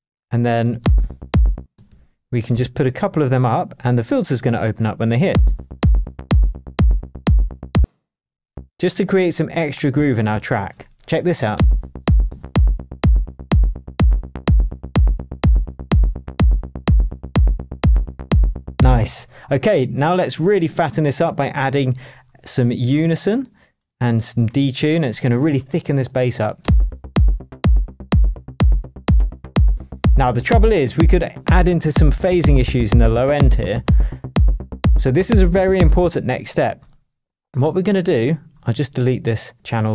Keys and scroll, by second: 0.8 super+space, 1.6 space, 5.2 space, 7.7 space, 11.5 super+space, 12.1 shift+space, 12.2 shift+Tab, 19.0 space.